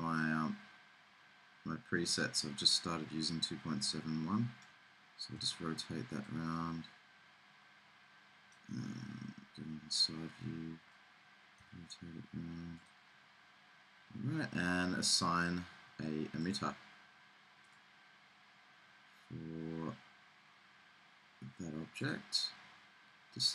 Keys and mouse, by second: 0.5 middle click, 1.3 middle click, 2.0 middle click, 4.1-6.2 middle drag, 5.5 r, 11.2-13.0 middle drag, 11.7 r, 15.2-16.4 middle drag, 19.7-23.5 middle drag.